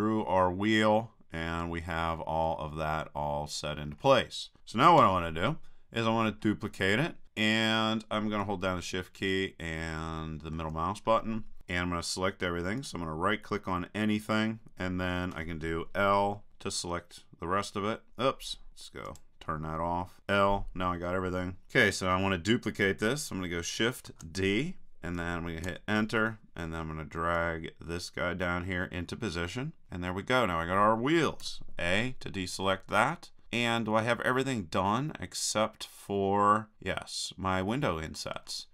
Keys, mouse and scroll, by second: 2.5-5.0 middle drag, 5.0 KP_3, 8.8-12.8 middle drag, 12.8-14.6 right drag, 16.5 l, 19.1-20.2 drag, 20.2 l, 24.1 shift+d, 27.4-29.4 drag, 31.4 a, 33.4-34.8 drag.